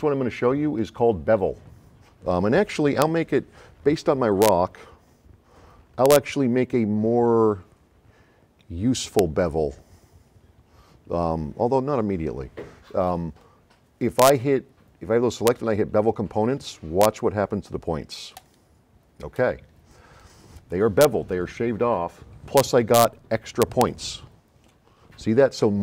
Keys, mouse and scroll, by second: 18.4 click, 25.3-25.8 scroll up 4.